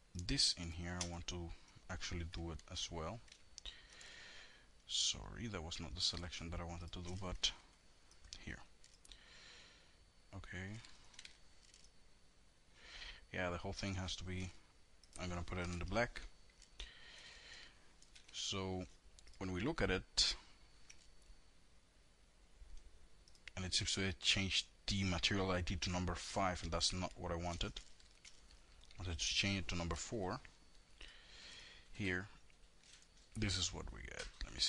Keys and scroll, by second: 1.8 alt+l, 6.5 alt+l, 10.1 F3, 14.6 KP_Enter, 17.4 F3, 25.4 ctrl+z, 26.2 ctrl+y, 28.6 KP_4, 28.9 KP_Enter.